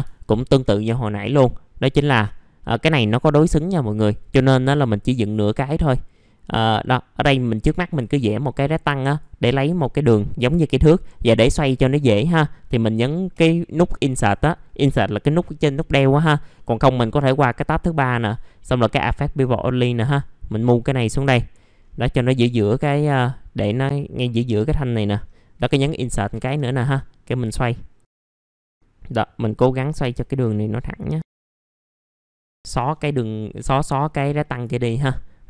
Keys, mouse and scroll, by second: 0.2 ctrl+right click, 1.1 click, 1.8 scroll up 1, 5.8 scroll down 1, 6.1 middle click, 7.3 click, 8.1 right click, 8.5-9.1 scroll down 1, 9.1 click, 9.5 middle click, 9.7-10.8 scroll down 1, 10.8-12.1 scroll up 1, 12.2-13.2 middle drag, 13.3 Insert, 16.5 middle click, 17.7-21.8 drag, 21.8-22.2 scroll up 1, 22.8-24.8 drag, 24.8 middle click, 25.0-25.5 scroll down 1, 25.5 Insert, 26.1 middle click, 26.9 click, 28.2 w, 28.4-30.0 drag, 30.0 e, 30.6-32.0 drag, 32.0 middle click, 32.1 scroll down 1, 32.2 F3, 32.2 click, 32.3 F3, 32.4 middle click, 32.6 Delete, 32.8-33.6 scroll up 1, 33.6 middle click, 34.0-34.4 scroll up 1, 34.4 middle click, 34.8 ctrl+right click.